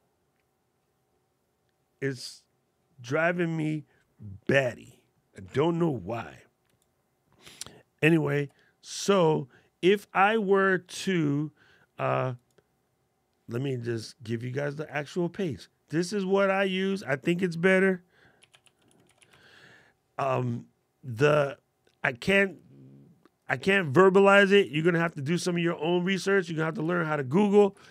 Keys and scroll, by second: 8.0 super+l, 24.5 super+c, 27.4 super+v.